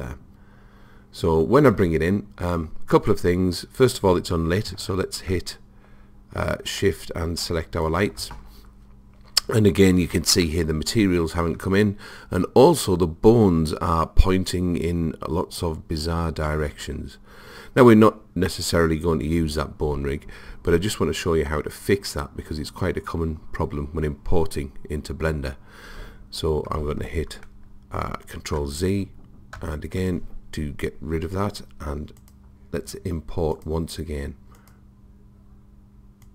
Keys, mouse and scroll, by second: 0.0 click, 2.2-5.0 middle drag, 7.8 click, 10.4-12.4 middle drag, 28.7 ctrl+z, 29.6 ctrl+z, 32.2-35.5 drag.